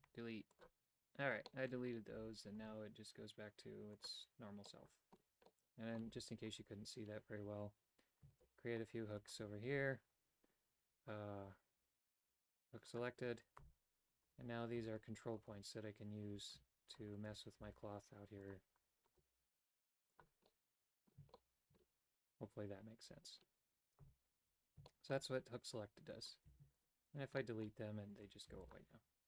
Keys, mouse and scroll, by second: 0.0 x, 1.6 middle click, 2.2 a, 4.1 click, 4.8 middle click, 5.5 middle click, 6.2 Tab, 6.6 right click, 8.4 shift+right click, 9.3 shift+right click, 12.9 click, 13.0-14.4 typing, 14.3 right click, 15.0 shift+right click, 15.5 shift+right click, 17.2 right click, 17.6 g, 19.2 right click, 19.4 g, 20.5 middle click, 21.4 shift+middle click, 24.1 Tab, 24.9 shift+middle click, 26.5 x, 27.5 shift+middle click, 28.6 x.